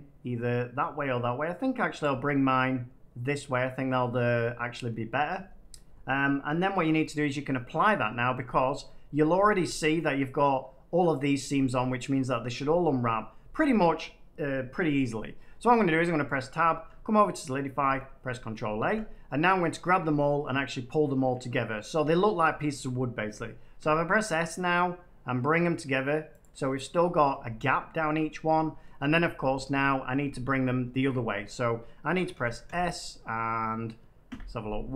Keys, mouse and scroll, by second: 1.9 click, 5.2 middle click, 7.2 middle click, 7.8 middle click, 8.7 middle click, 9.2 Tab, 9.9 middle click, 15.4 Tab, 17.7 ctrl+a, 18.7 Tab, 19.5 middle click, 20.4 scroll, 21.0 middle click, 21.3 middle click, 22.1-23.1 middle drag, 22.1 scroll, 23.7 s, 26.3 click, 26.5 Tab, 28.8 middle click, 30.8 Tab, 32.3-32.6 typing, 34.2 y.